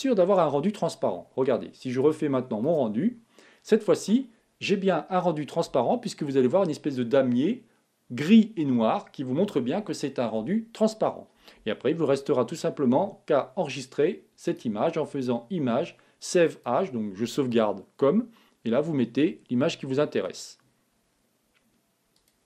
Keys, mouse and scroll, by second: 5.8 click.